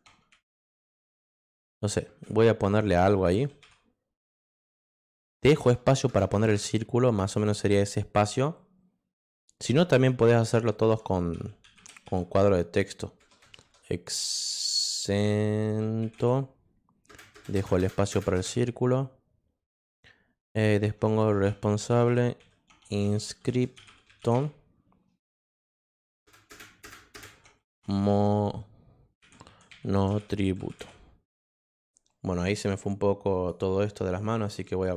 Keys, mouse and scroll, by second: 0.0-4.1 typing, 6.3 space, 10.0-13.2 typing, 15.2-18.3 typing, 21.3-24.7 typing, 26.2 space, 26.8 space, 27.6 m, 29.3-31.3 typing, 32.8 click, 34.9 click.